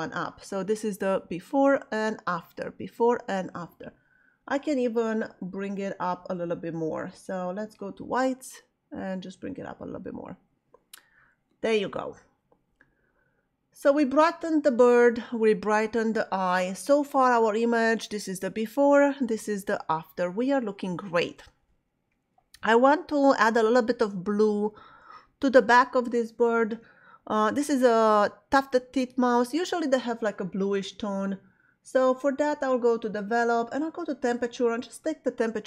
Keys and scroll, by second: 17.4 \.